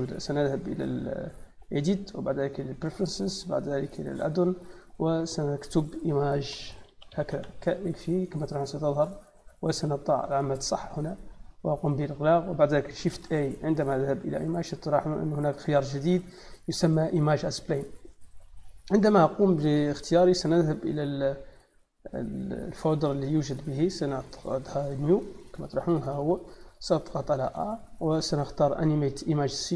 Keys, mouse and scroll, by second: 1.4 click, 2.3 click, 4.0 click, 6.6 m, 7.2 e, 8.8 click, 10.3 click, 11.5 click, 12.5 click, 13.1 shift+a, 17.5 click, 19.5 middle click, 19.5 scroll down 1, 21.9 middle click, 23.0 click, 23.2 click, 24.2 click, 24.4 click, 25.0 click, 25.2 click, 26.5 click, 29.5 click.